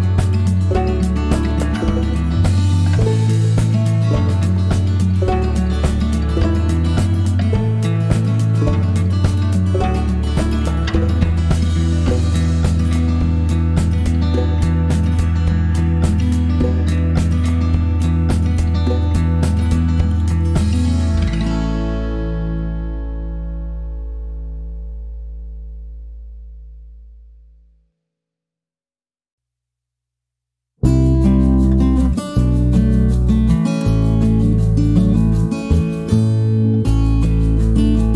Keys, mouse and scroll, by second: 0.5 click, 2.8 shift+click, 4.2 click, 5.9 click, 8.4 click, 11.6 click, 13.3 click, 15.3 click, 16.8 7, 18.1 Return, 23.8 shift+click, 25.3 click, 26.7 click, 28.3 click, 29.7 -, 30.6-31.8 middle drag, 34.9 click, 36.4-38.1 ctrl+drag.